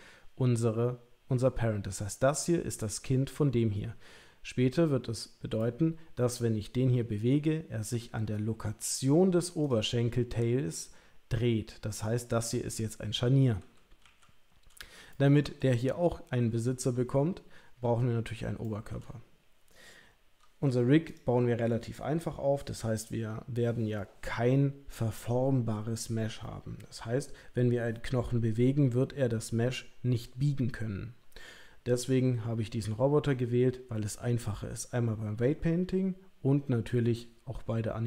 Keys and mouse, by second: 5.6 middle click, 9.6 click, 14.1 KP_1, 15.1 shift+middle click, 18.6 shift+middle click, 19.1-21.0 middle drag, 21.0 click.